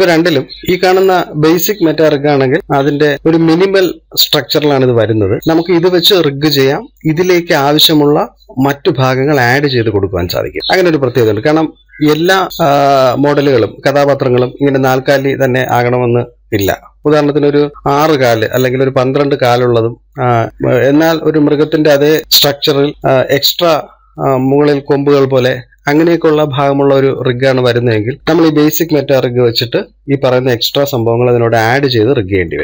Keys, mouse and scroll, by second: 1.5 click, 2.5 scroll up 1, 2.6-5.3 shift+middle drag, 5.4-8.1 middle drag, 10.6-12.9 shift+middle drag, 20.9-23.1 shift+middle drag, 27.8-31.2 middle drag, 32.5-32.6 shift+middle drag.